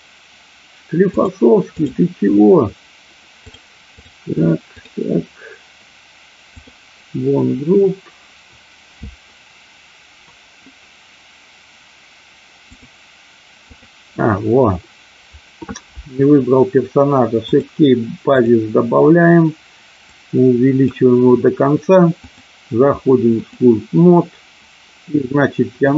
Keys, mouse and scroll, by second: 1.0 click, 3.4 click, 6.5 click, 12.7 click, 13.5 click, 17.5 click, 18.2 click, 20.0 click, 22.2-23.6 drag.